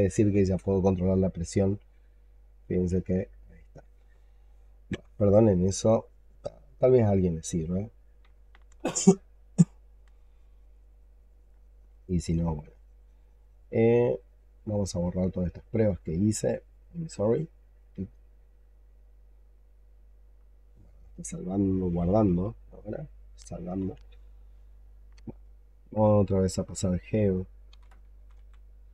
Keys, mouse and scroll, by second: 4.8 x, 25.6 alt+click, 27.6-28.7 typing.